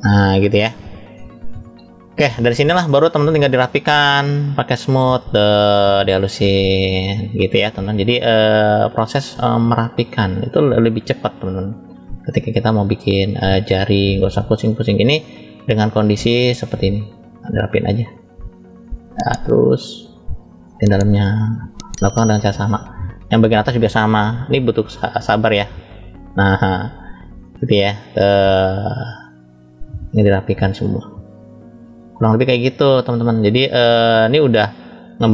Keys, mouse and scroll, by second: 4.0 click, 7.6 middle click, 8.6 scroll down 1, 9.4 click, 9.4 scroll down 2, 11.5 middle click, 12.4 click, 16.4 click, 16.4 scroll up 3, 19.3 click, 19.8 middle click, 20.9 click, 22.2 middle click, 23.1-23.9 scroll up 2, 24.1 shift+middle click, 25.2 click, 26.6 middle click, 27.8 click, 29.1 middle click, 30.2 click, 31.4 middle click, 32.3 click, 34.0 click, 34.5-35.3 middle drag.